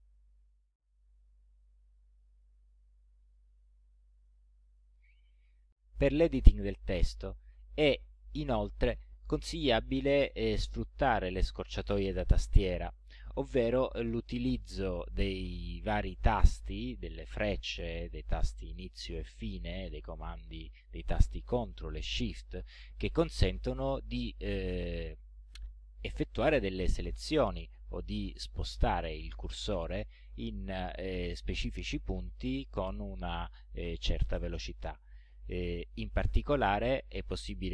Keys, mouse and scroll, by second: 0.7 click, 1.6 click, 2.6 ctrl+scroll up 2, 3.1 ctrl+scroll up 2, 3.8 ctrl+scroll down 2, 4.3 ctrl+middle click, 36.3 Right.